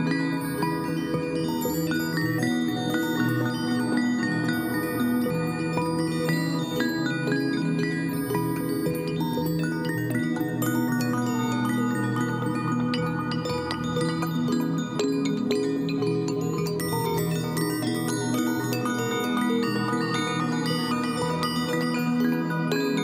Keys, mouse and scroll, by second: 7.9 2, 10.5-11.8 typing, 14.6 typing, 15.2 ctrl+a.